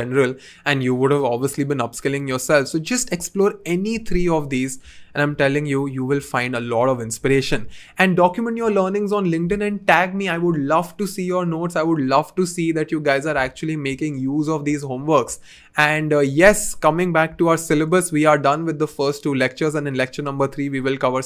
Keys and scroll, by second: 17.3 2.